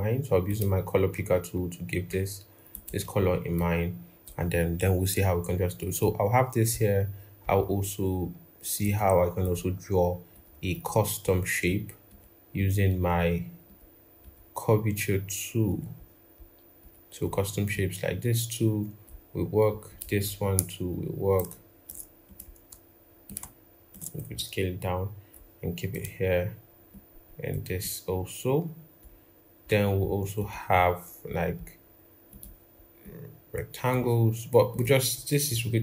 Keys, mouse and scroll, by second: 7.3 right click, 10.5 double click, 11.5 double click, 21.2 shift+click, 23.1 shift+click, 31.4 right click.